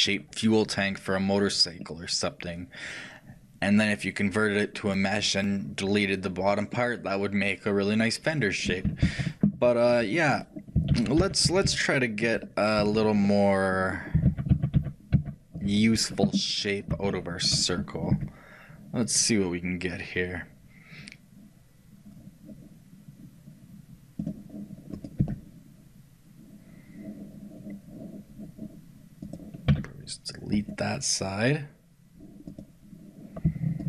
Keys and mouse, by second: 6.8-8.9 middle drag, 9.1 ctrl+z, 9.7 middle click, 11.0-12.7 ctrl+z, 11.0-12.7 ctrl+middle drag, 14.4 ctrl+z, 16.6 middle click, 18.2 g, 33.3-33.8 shift+right drag.